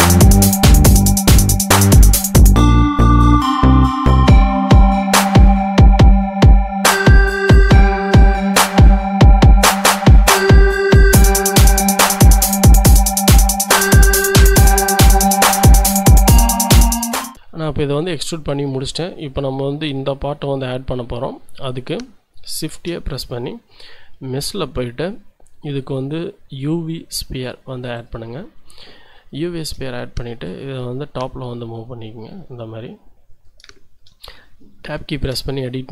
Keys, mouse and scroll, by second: 1.1 click, 1.5 shift+click, 2.7 e, 2.9 z, 6.8 click, 7.6 s, 8.9 click, 10.1 e, 10.4 z, 13.2 click, 13.5-14.0 scroll down 2, 14.4 shift+click, 18.7 Tab, 21.3-22.4 scroll down 1, 22.7 shift+a, 27.9 click, 28.8 middle click, 29.3 shift+click, 30.5-33.6 drag, 33.7 shift+click, 34.1-34.8 shift+scroll up 3, 35.0 Tab, 35.5 shift+click.